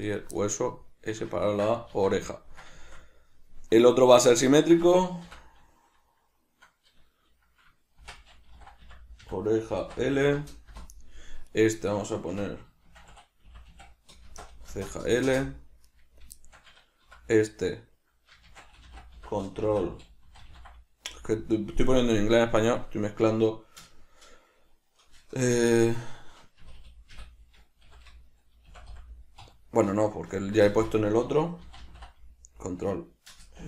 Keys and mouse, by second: 0.2 right click, 0.5-11.6 middle drag, 2.1 alt+q, 5.4 F2, 11.6 right click, 12.4 F2, 16.0 right click, 16.6-33.6 shift+middle drag, 17.2 F2, 26.9 BackSpace.